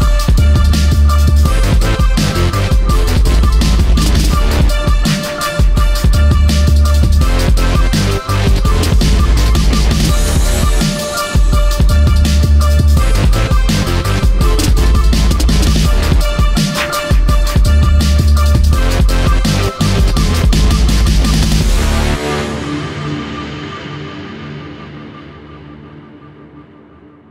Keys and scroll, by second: 14.8-17.4 typing.